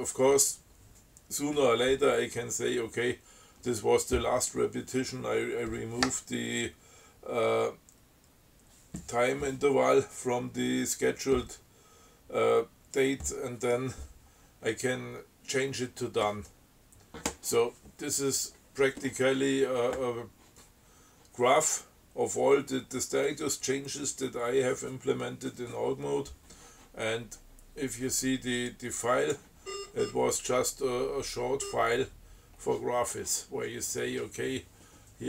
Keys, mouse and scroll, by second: 28.9 click, 29.6 scroll up 2, 29.9 scroll down 2, 30.1-30.4 scroll up 2, 30.7-31.2 scroll down 2, 32.0 scroll down 1, 35.1 scroll up 1.